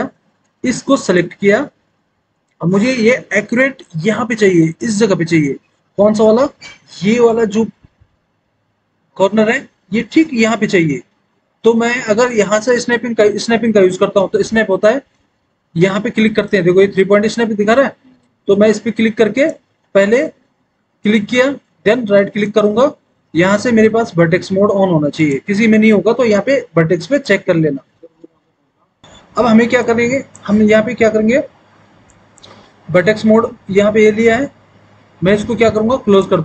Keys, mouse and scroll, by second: 25.2 click.